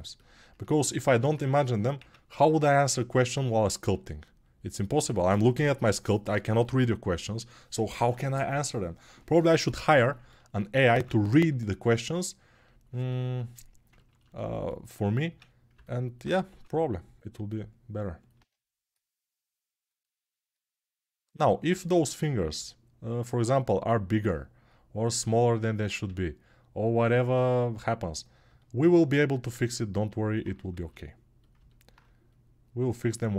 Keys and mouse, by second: 1.8 Tab, 3.6 g, 8.1-25.1 middle drag, 10.8 ctrl+Tab, 15.0 Tab, 25.1-27.9 drag, 27.9-33.0 middle drag, 33.0-33.3 alt+drag.